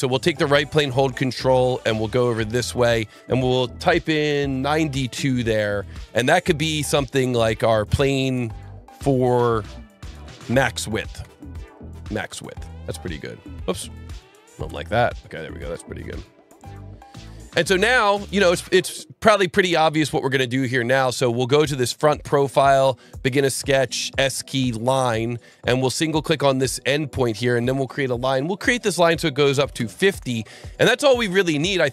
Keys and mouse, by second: 1.5 ctrl+click, 4.6 KP_9, 4.8 KP_2, 5.1 KP_Enter, 6.0 KP_Enter, 7.6 click, 8.9 click, 9.5-12.4 typing, 12.4 Return, 13.7 F2, 14.1 Right, 14.4 BackSpace, 14.6 Return, 15.6 click, 21.6 click, 23.1 click, 23.7 s, 24.7 click, 25.7 click, 29.5 KP_5, 29.7 KP_Enter, 29.7 KP_0, 30.7 Escape.